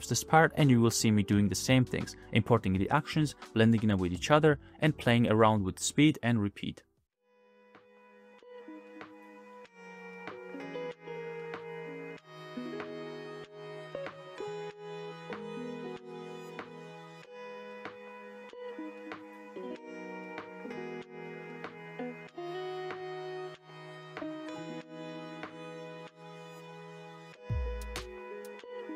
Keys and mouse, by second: 0.0-1.2 shift+middle drag, 1.8-2.4 middle drag, 2.5 space, 3.2-3.8 middle drag, 3.9-4.2 shift+middle drag, 5.0 space, 5.4-6.4 drag, 7.3 shift+click, 8.7 space, 9.0-9.4 drag, 9.1 space, 9.5 space, 9.6 click, 9.9 click, 10.2 click, 10.9-13.6 typing, 11.7 click, 11.9 click, 12.6 middle click, 12.8 click, 13.0 click, 13.1 right click, 13.5 click, 13.5 right click, 13.8 click, 13.8 right click, 15.1 shift+x, 15.2 shift+a, 15.5 click, 15.7 click, 16.1 space, 16.3 middle drag, 16.6 space, 16.6 drag, 16.9 middle click, 17.0 click, 17.3 click, 17.6 shift+click, 18.4 space, 18.6-18.9 drag, 18.7 space, 19.0 space, 19.2 click, 19.8 space, 19.9-20.3 drag, 20.4 shift+click, 20.8 click, 21.3 g, 21.8 click, 21.9 space, 22.3 click, 22.3 space, 22.5 click, 23.0 click, 23.4 click, 24.6 g, 24.7 x, 25.0 shift+a, 25.5 ctrl+g, 26.8 space, 27.0 click, 27.2 space, 27.5 space, 27.7 click, 27.8 space, 28.9 middle click.